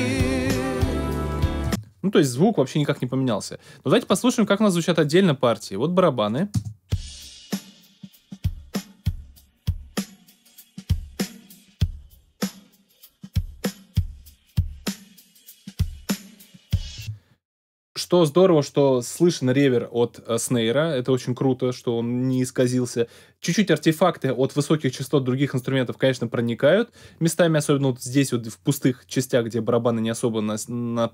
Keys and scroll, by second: 1.6 alt+space, 2.1 space, 6.5 space, 16.9 space.